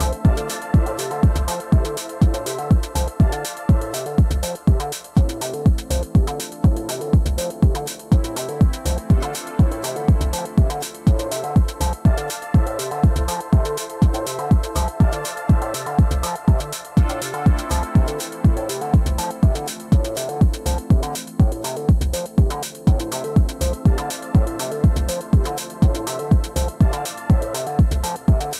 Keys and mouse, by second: 1.7-2.7 drag, 2.6 KP_0, 4.0 click, 8.3 click, 9.7 click, 11.1 click, 13.0 click, 13.6 click, 23.3 click.